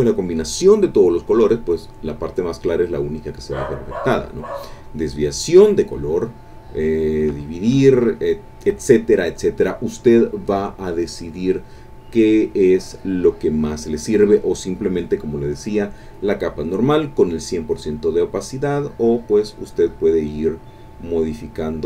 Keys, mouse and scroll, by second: 3.5 click, 4.7 click, 6.2 click, 7.1 click, 8.2 click, 12.4 click, 18.2-19.2 drag, 20.6 click, 21.3 click.